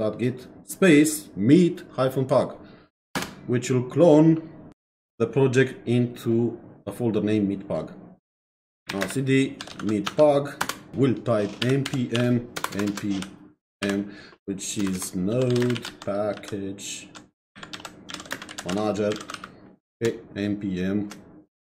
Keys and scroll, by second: 3.2 Return, 8.6-20.1 typing, 10.6 Return, 21.6-21.7 typing.